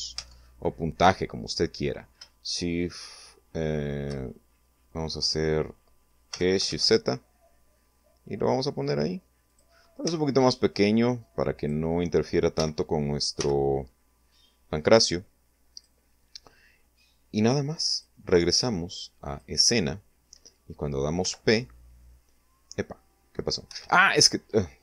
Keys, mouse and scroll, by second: 5.2 g, 5.7 shift+z, 8.4 click, 9.0 s, 10.5 click, 11.5 g, 12.3 x, 14.7 click, 16.9 click, 18.2 click, 20.2 p, 22.7 Escape.